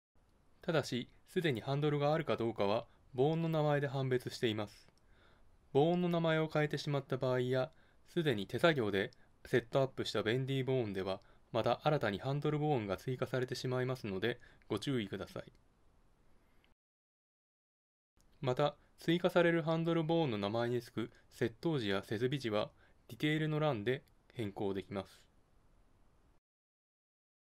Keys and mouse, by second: 3.3-26.3 right drag, 27.1 Tab.